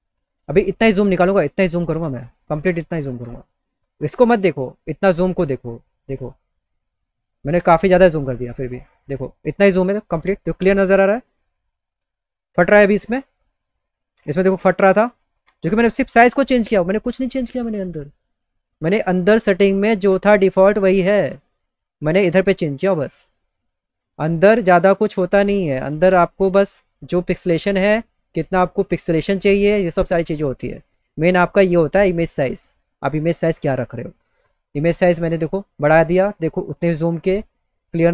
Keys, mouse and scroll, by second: 5.6 middle click, 10.1 middle click, 17.4 click, 18.5 click, 18.9 click, 19.3 click, 19.7 click, 20.2 click, 20.8 click, 24.0 click, 24.3 click, 25.1 click, 25.4 click, 27.9 click, 29.4 click, 30.4 click, 34.3 click, 35.6 click.